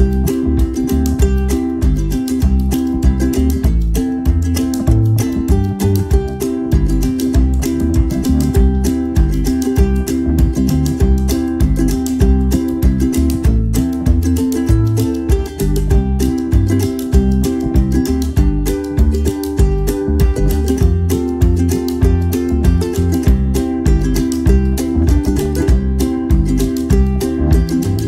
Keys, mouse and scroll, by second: 1.7 right click, 2.6 click, 4.2 shift+click, 5.2 click, 7.9 click, 12.5 alt+Num_Lock, 16.5 ctrl+d, 17.8 ctrl+Num_Lock, 19.0 ctrl+d, 19.2 ctrl+d, 19.4 ctrl+d, 19.7 ctrl+d, 20.0 ctrl+d, 21.0 click, 22.6 click, 24.4 click, 25.7 click.